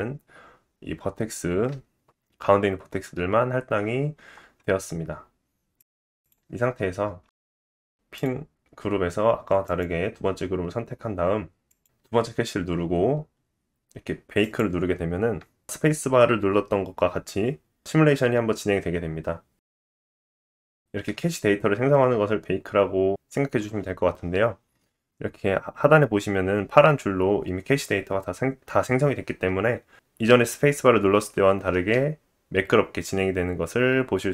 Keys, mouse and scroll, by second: 5.9 Tab, 6.2 click, 6.2 scroll down 5, 6.4-7.3 scroll down 6, 7.2-8.2 drag, 11.8-14.4 drag, 31.7 space.